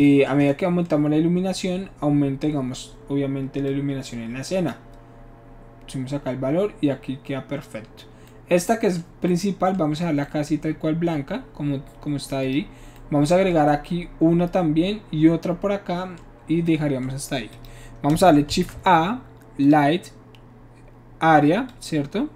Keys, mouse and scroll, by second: 3.7-4.7 drag, 8.3-9.0 middle drag, 10.2-10.7 middle drag, 12.4 click, 17.6 click, 18.5 shift+a, 19.6 click, 21.7 click.